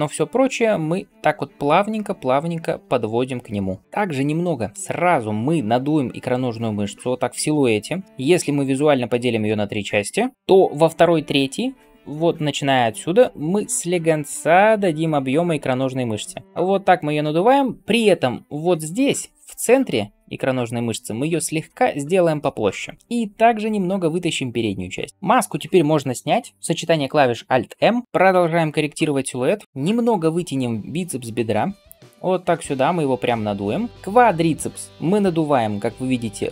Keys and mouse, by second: 10.3-27.7 right drag, 10.3 d, 29.6 KP_3.